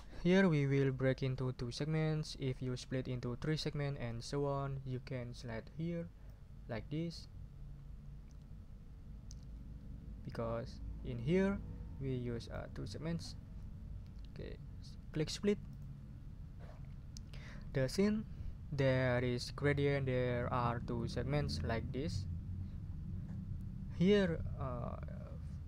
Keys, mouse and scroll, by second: 15.7 click.